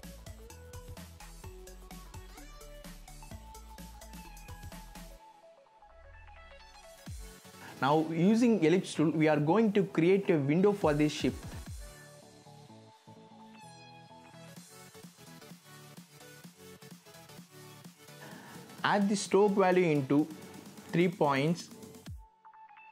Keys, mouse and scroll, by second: 0.9-1.3 scroll down 1, 2.3 z, 3.1 scroll up 1, 3.6 click, 4.1-4.5 scroll down 1, 4.5 click, 9.9 shift+click, 12.5 shift+v, 13.1 click.